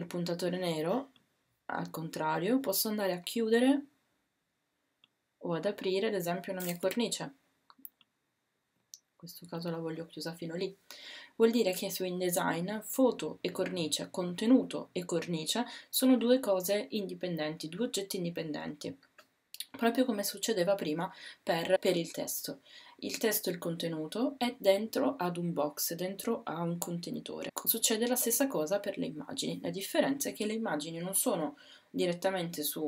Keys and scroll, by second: 6.8 w.